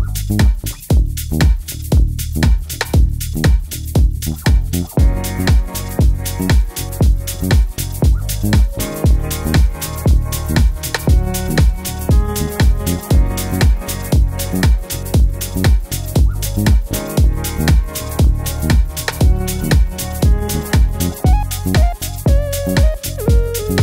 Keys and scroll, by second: 14.3 d, 15.8 typing, 17.6 typing.